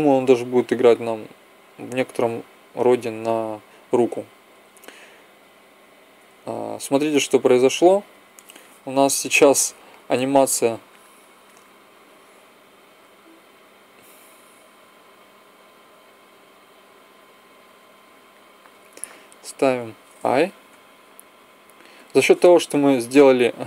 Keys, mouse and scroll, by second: 0.1 Right, 0.6 Right, 2.8 Right, 3.7 Right, 4.1 Right, 4.4 Right, 4.8 Right, 5.4 Right, 6.2 Left, 6.8 Right, 7.3 Left, 7.6 Left, 15.8 g, 18.2 click, 20.6 i.